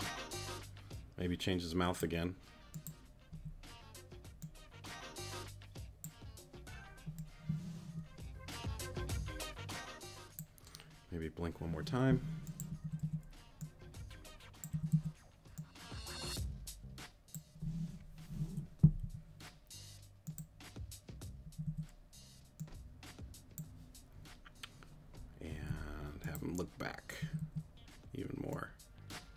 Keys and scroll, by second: 3.3 Right, 12.8 Right, 14.7 Right, 18.8 Left, 21.4 Right, 25.5 Left, 27.2 Right.